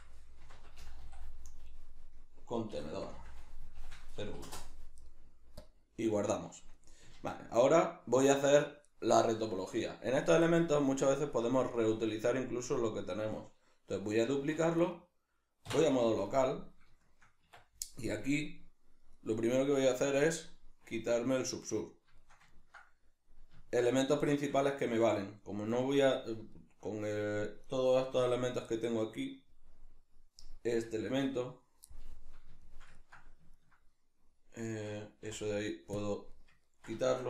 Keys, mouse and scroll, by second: 7.2 shift+a, 8.6 Escape, 14.4 shift+d, 14.9 right click, 15.6 \, 16.3-21.1 middle drag, 17.4 Tab, 21.1-21.9 drag, 21.9-27.6 shift+middle drag, 27.6 right click, 28.2 l, 31.9-37.2 middle drag, 35.2 x.